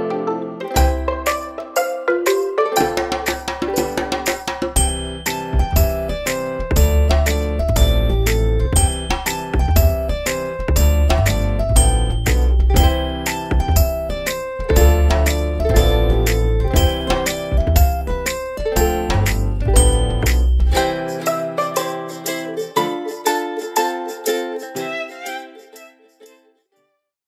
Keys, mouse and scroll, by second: 19.2 click.